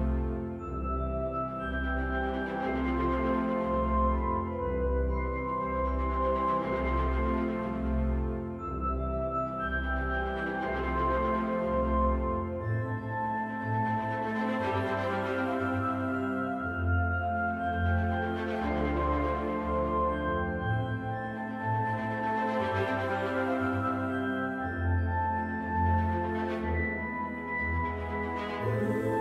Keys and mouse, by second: 1.0 KP_3, 3.4 g, 4.1 x, 5.0 y, 8.5 right click, 9.7 shift+d, 10.4 y, 17.0 right click, 23.9-25.5 right drag, 26.3-27.6 right drag.